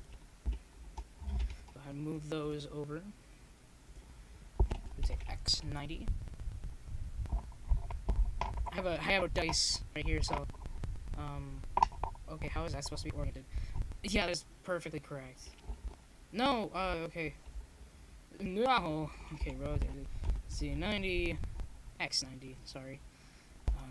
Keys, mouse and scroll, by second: 0.1 KP_0, 3.9 click, 4.9-6.2 drag, 5.3 right click, 5.9-7.5 middle drag, 7.5 m, 10.3-12.3 drag, 11.4 r.